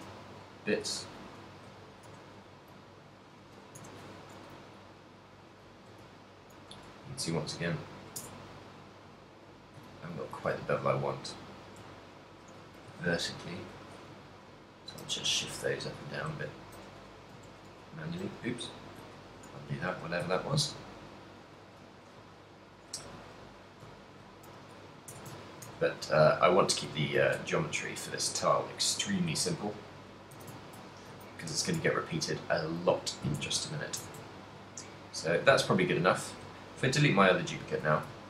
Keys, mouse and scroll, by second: 1.3 click, 2.8 click, 4.6 middle click, 5.8 shift+middle click, 6.2 ctrl+middle click, 6.8 Tab, 8.3 Tab, 8.7 middle click, 10.0 ctrl+middle click, 10.4 a, 10.7 shift+middle click, 11.2 middle click, 12.2 alt+right click, 12.9 g, 13.9 click, 14.7 alt+right click, 15.1 f, 15.1 g, 15.3 z, 15.8 right click, 17.8 ctrl+z, 18.4 g, 19.3 shift+click, 19.6 g, 20.3 click, 20.4 shift+middle click, 21.0 middle click, 21.8 a, 21.9 middle click, 22.8 alt+right click, 23.2 g, 23.7 click, 24.0 alt+right click, 24.5 g, 25.2 Tab, 25.2 click, 25.6 ctrl+middle click, 25.8 a, 26.1 middle click, 26.5 middle click, 27.2 ctrl+middle click, 28.4 right click, 29.3 click, 30.1 middle click, 30.5 a, 30.7 ctrl+middle click, 31.1 middle click, 31.5 shift+middle click, 31.5 a, 32.3 middle click, 33.0 ctrl+middle click, 33.5 Tab, 33.8 middle click, 34.1 Tab, 34.3 ctrl+middle click, 34.7 middle click, 36.3 right click, 36.4 x, 37.6 shift+1.